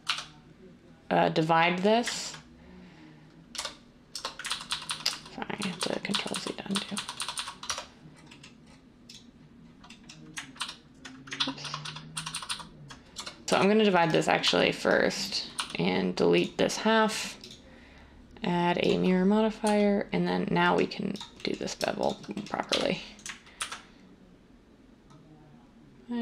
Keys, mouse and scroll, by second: 0.1 ctrl+r, 3.5 1, 4.5 ctrl+z, 4.7 ctrl+z, 4.8 ctrl+z, 7.6 Tab, 10.5 ctrl+x, 11.3 ctrl+z, 11.6 ctrl+z, 11.8 ctrl+z, 13.1 1, 13.5 ctrl+r, 14.4 z, 15.5 x, 22.7 1, 23.5 ctrl+b.